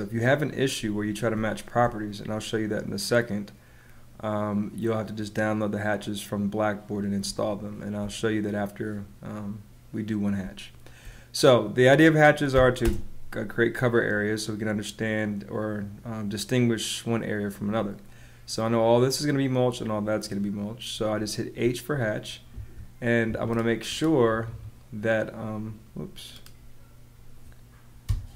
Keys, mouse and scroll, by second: 1.3 space, 7.2 space, 10.3 space, 12.5 h, 12.8 space, 20.9 space, 22.5 Escape, 28.0 BackSpace.